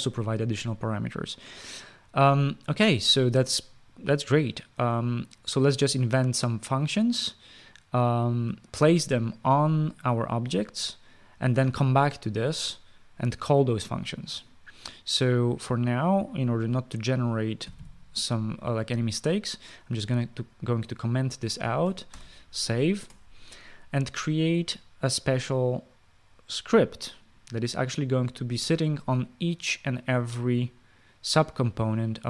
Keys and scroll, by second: 18.4 typing, 22.9 ctrl+s.